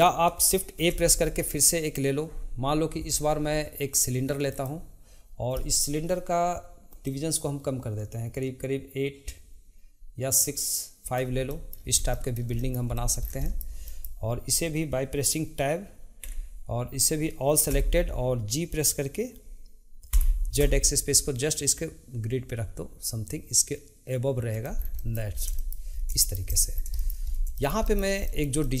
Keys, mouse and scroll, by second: 0.7 shift+a, 7.0-10.1 drag, 11.5-11.9 middle drag, 11.9 scroll, 12.1-12.9 shift+middle drag, 12.9 click, 13.2 scroll down 1, 13.4-16.3 shift+middle drag, 26.7 scroll down 1, 26.9 shift+middle click, 27.2-27.6 scroll up 2, 27.6-28.8 shift+middle drag.